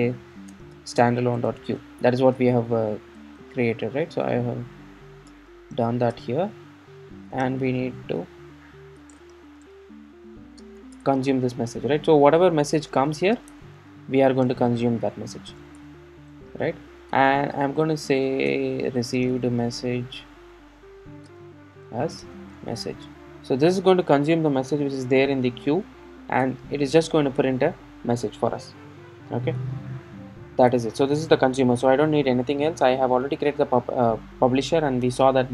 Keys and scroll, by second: 6.2 Return, 17.1 Tab, 24.3 super+s, 25.0 super+s, 25.0 alt+super+l.